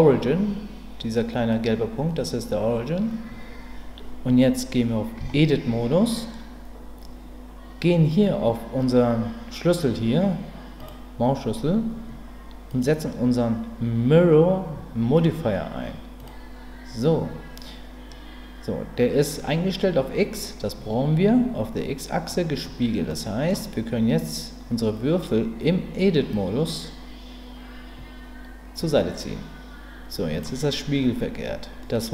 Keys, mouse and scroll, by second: 5.2 Tab, 12.8-16.3 drag, 23.1 middle click, 26.4-30.4 drag, 31.8 middle click.